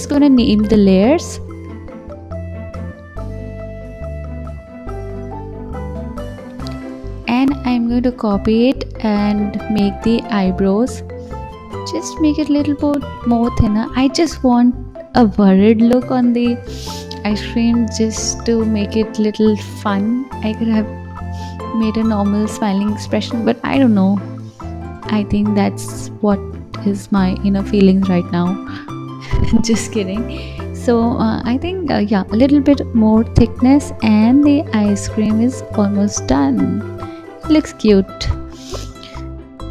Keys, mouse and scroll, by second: 0.4 click, 0.6-3.6 drag, 3.8 click, 5.0 click, 5.2-7.8 drag, 8.6 shift+d, 11.2 r, 12.9-14.3 drag, 15.4 g, 16.5 shift+d, 18.0 r, 18.7 g, 19.5 click, 19.8-21.1 scroll down 2, 21.1 click, 21.7 s, 22.6 g, 24.3 click, 24.6 scroll down 2, 25.1-25.7 scroll up 5, 26.0-27.2 scroll down 2, 27.2-27.9 drag, 27.9-28.3 scroll up 1, 28.3-31.4 middle drag, 32.5 click, 33.4 click, 35.2-38.3 middle drag, 38.7 KP_1, 39.3-39.7 scroll up 2.